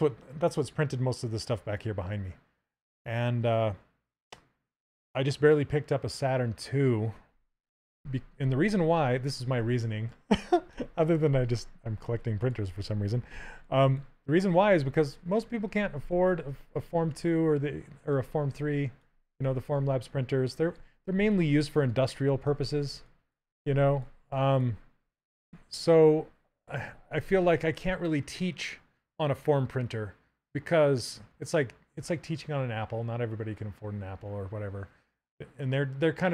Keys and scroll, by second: 13.0 w.